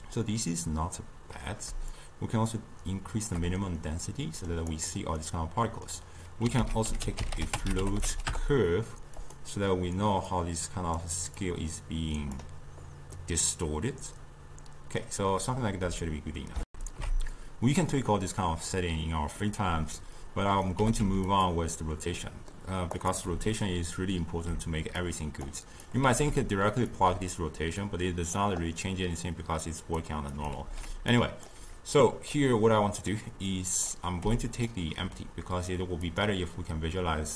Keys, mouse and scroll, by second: 2.0-3.9 shift+drag, 3.9-4.8 middle drag, 4.8 click, 5.3-6.3 middle drag, 6.7 ctrl+a, 10.3-13.2 drag, 13.2 scroll down 2, 13.3-16.2 middle drag, 16.7 ctrl+alt+shift+q, 18.4-20.2 middle drag, 20.2 click, 20.8 g, 22.2-23.0 middle drag, 23.0 click, 24.3 ctrl+h, 25.0 click, 25.9 click, 26.1 ctrl+h, 26.9-29.8 drag, 30.3 click, 30.6 ctrl+h, 31.1-32.0 drag, 32.7 middle click, 33.5-34.2 drag, 34.2 g, 36.1 click.